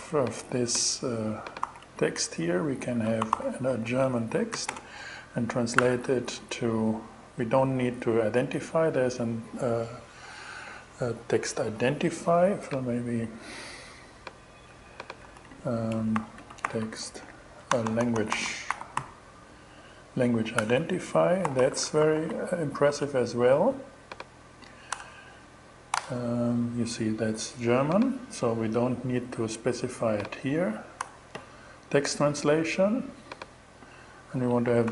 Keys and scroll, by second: 1.1 super+c, 2.0 shift+super+c, 2.4 shift+2, 2.8 shift+super+v, 3.3 shift+super+2, 3.6-5.2 typing, 14.7 super+c, 15.4 shift+super+c, 15.5-18.9 typing, 19.7 Down, 20.0 Return, 20.9 alt+g, 21.1 alt+shift+2, 21.6 shift+super+v, 24.3 BackSpace, 25.4 shift+BackSpace, 30.4 BackSpace, 34.1-34.9 typing.